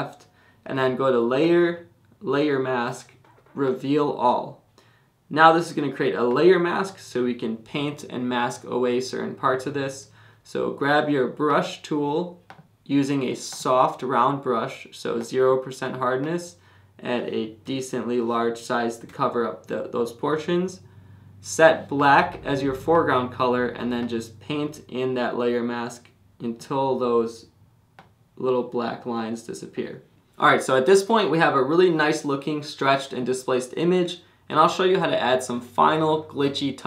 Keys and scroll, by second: 17.6 [, 18.8 [, 20.1 [.